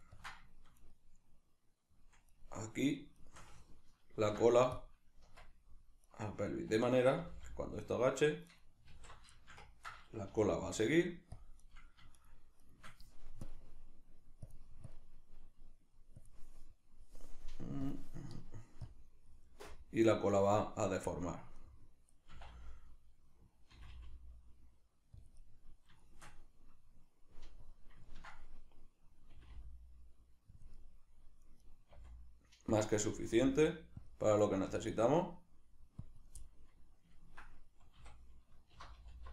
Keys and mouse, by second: 0.8 right click, 2.3 right click, 3.2 shift+right click, 4.1 ctrl+p, 6.1 right click, 6.5-8.6 middle drag, 7.2 g, 8.6 right click, 8.9 alt+q, 9.4-11.4 ctrl+shift+middle drag, 10.3 g, 11.4 click, 11.6 right drag, 12.2 shift+right drag, 12.6 shift+right drag, 13.4-21.1 drag, 21.1-25.3 middle drag, 22.4 e, 25.3 click, 25.4-27.6 middle drag, 27.6 click, 28.1-30.6 ctrl+middle drag, 29.3 r, 30.6 click, 30.8 middle click, 31.7 right click, 32.0 r, 32.8 click, 33.1 r, 34.1 click, 34.5 right click, 34.7 r, 36.2 click, 36.4-39.3 middle drag, 37.9 a.